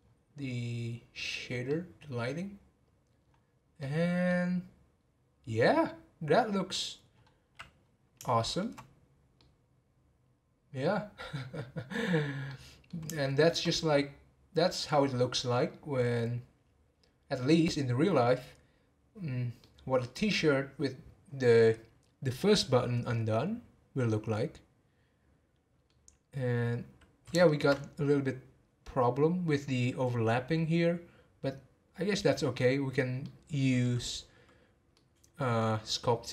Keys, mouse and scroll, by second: 1.7-3.2 middle drag, 3.2-3.5 scroll up 5, 3.7-7.0 middle drag, 7.2 scroll down 4, 8.3-12.4 shift+middle drag, 12.5-13.7 middle drag, 13.7 scroll up 2, 14.5 middle click, 14.9 scroll up 5, 15.5-18.6 middle drag, 19.6-22.6 middle drag, 24.1-26.0 middle drag, 26.0-27.4 scroll down 1, 27.4 shift+middle click, 27.7-30.8 scroll up 4, 30.8-33.2 scroll up 1, 33.2-34.0 middle drag, 34.0-34.9 scroll down 3, 34.9-36.3 middle drag.